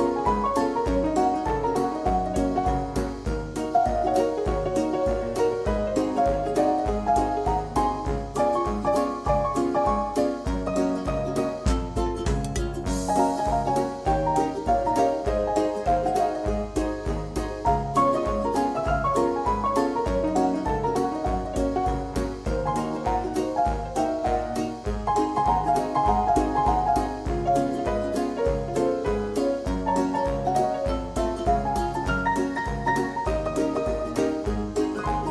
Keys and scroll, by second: 22.2 2.